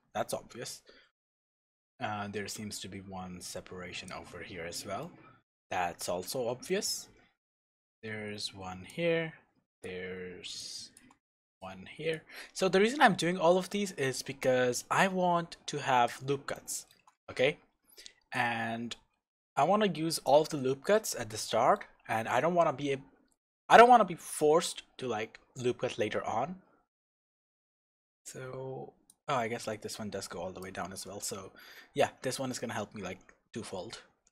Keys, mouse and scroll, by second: 0.2-1.2 scroll up 1, 1.8 click, 5.0-7.5 shift+middle drag, 7.5 click, 9.8 click, 10.9 shift+click, 12.1 click, 14.8 click, 16.5-18.3 shift+middle drag, 18.3 click, 21.1-29.1 shift+middle drag, 29.1 click, 31.4 scroll down 1, 33.8 scroll up 1.